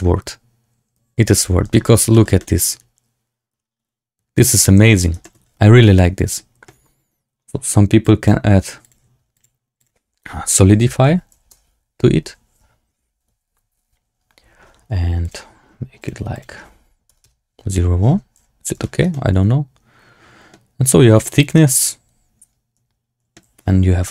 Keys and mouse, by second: 0.0 space, 1.3 z, 2.0 shift+click, 2.3-4.4 drag, 4.7 z, 5.1 shift+drag, 7.9 click, 8.7 click, 9.4-13.8 drag, 15.1-17.4 drag, 18.3 z, 18.7 shift+drag, 19.0-19.7 drag, 19.7-20.4 middle drag, 21.1 shift+middle drag, 21.5-23.2 middle drag.